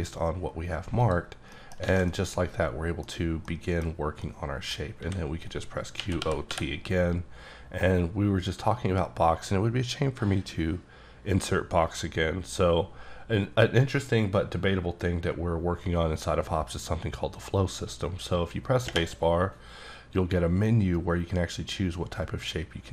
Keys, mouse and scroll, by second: 1.0 click, 1.3 scroll down 3, 1.5 middle click, 1.9 alt+a, 2.1 middle click, 3.5 middle click, 4.2 middle click, 5.0-6.5 typing.